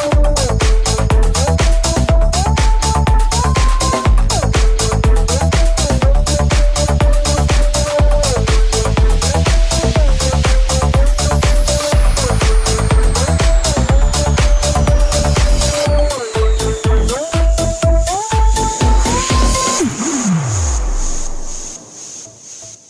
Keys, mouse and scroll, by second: 7.3 shift+d, 7.9 click, 8.6 shift+click, 8.9 shift+d, 9.5-10.5 middle drag, 10.5-16.1 middle drag, 16.8-22.8 middle drag, 17.4 right click, 19.8 alt+z, 19.8 t, 19.9 Tab.